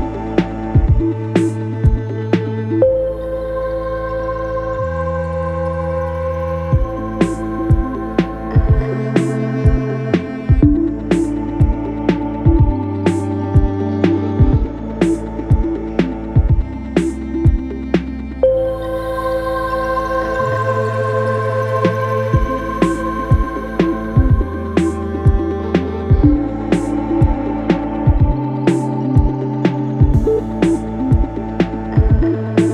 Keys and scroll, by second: 3.6 3, 3.9 ], 4.4 ctrl+z, 25.0 4.